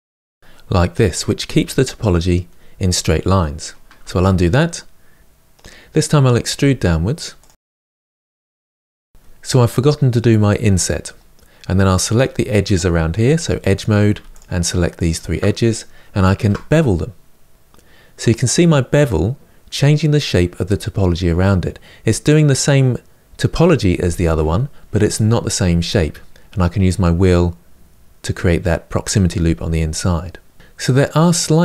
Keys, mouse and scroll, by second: 3.7 ctrl+z, 5.2-6.3 middle drag, 6.3 e, 7.4-8.0 middle drag, 8.0 g, 8.3-10.8 middle drag, 10.8-11.9 scroll up 3, 11.9 click, 12.9 2, 13.5 click, 14.7 shift+click, 16.1 ctrl+b, 30.5 scroll down 3, 30.7-31.6 middle drag.